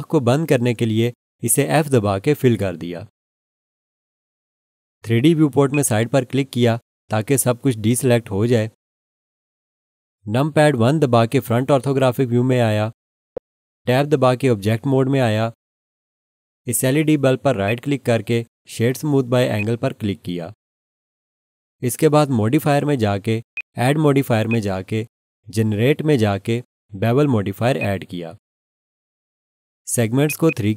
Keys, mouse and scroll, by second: 1.9 f, 5.7 click, 11.4 1, 12.3-13.2 scroll down 1, 14.7 Tab, 17.6 right click, 19.6 click, 23.5 click, 27.8 click, 30.5 double click.